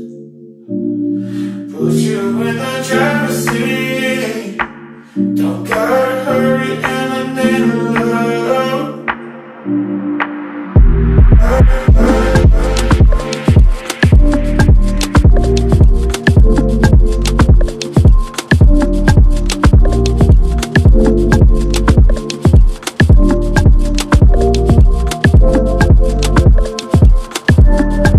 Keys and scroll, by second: 6.3 space, 10.7 space, 12.8 ctrl+d, 13.6 Right, 13.7 BackSpace, 13.8 3, 14.0 Return, 18.3 Delete, 20.2-22.9 typing, 23.1 Escape, 26.5 Up.